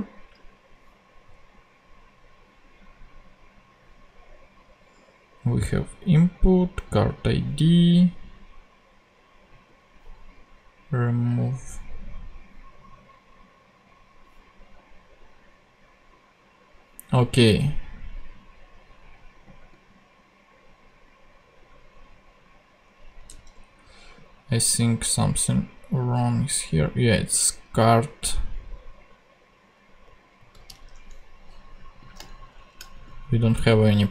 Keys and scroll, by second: 23.2 super+Tab, 30.3 super+c, 30.7 super+Tab, 32.5 shift+super+Left, 32.9 shift+super+v, 33.8 super+v.